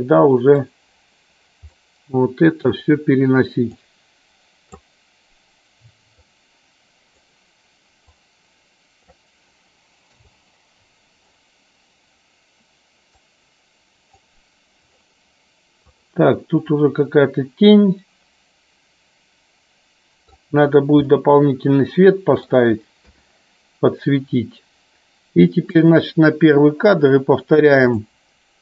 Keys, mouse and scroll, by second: 1.8-2.8 middle drag, 3.9 click, 6.3-7.3 drag, 8.2 click, 10.2 KP_0, 13.2-14.3 drag, 16.0 click, 16.9-20.5 middle drag, 21.3-22.7 middle drag, 23.2 KP_1, 25.8 click, 28.1 drag.